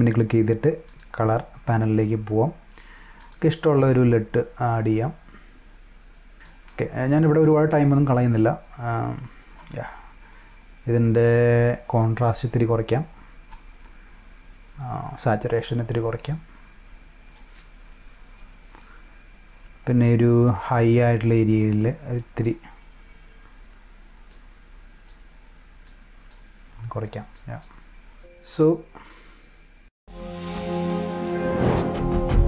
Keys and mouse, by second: 0.8 click, 3.1 click, 6.3 click, 7.1 click, 11.9 click, 15.2 click, 20.4 click, 21.5 click, 24.2 click, 25.8 click, 27.3 click, 29.0 click.